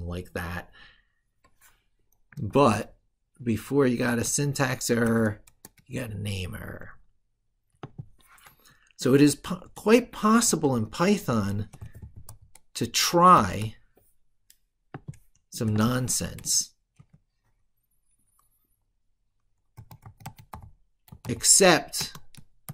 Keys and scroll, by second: 2.3 ctrl+shift+Left.